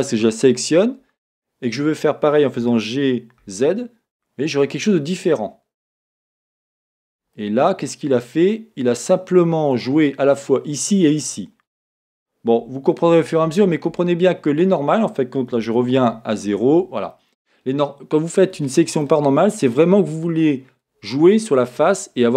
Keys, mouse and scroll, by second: 0.0 shift+click, 2.6 g, 6.6 click, 6.9 middle click, 6.9 scroll down 1, 7.5 middle click, 8.3 middle click, 8.7-22.3 middle drag, 13.1 z, 16.2 z.